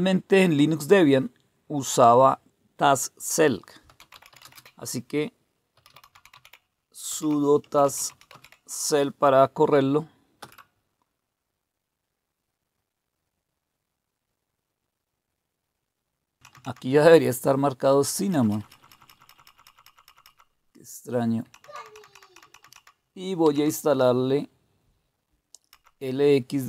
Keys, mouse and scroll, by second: 3.6-9.0 typing, 10.4 Return, 10.9 typing, 16.4 Down, 16.5 Down, 18.2 Up, 18.3 Up, 18.5 Up, 18.8 Up, 18.9 Up, 19.1 Up, 19.3 Up, 19.5 Up, 19.7 Up, 20.1 Up, 21.4 Down, 21.6 Down, 21.8 Down, 22.0 Down, 22.2 Down, 22.4 Down, 23.4 Down, 25.6 Up.